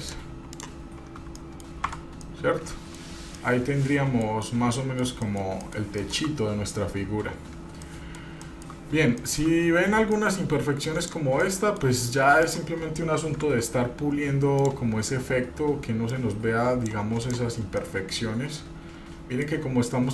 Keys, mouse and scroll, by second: 0.7 click, 1.0 scroll down 2, 1.6 middle click, 2.1 Tab, 2.4-3.2 middle drag, 3.2 scroll down 1, 3.6-5.2 middle drag, 5.4 middle click, 5.8 middle click, 6.2 shift+middle drag, 6.5 scroll up 1, 8.0-8.5 middle drag, 8.8 shift+middle drag, 9.1 scroll up 2, 9.5 shift+middle drag, 9.8-10.2 scroll up 1, 10.3 shift+middle drag, 10.8 scroll up 1, 11.2 click, 11.6 middle click, 12.6 click, 13.6 Tab, 14.8 click, 16.3 click, 17.4 click, 17.9 scroll down 2, 18.1-19.4 middle drag, 19.4 click, 19.5 middle click, 19.8-20.1 scroll up 1.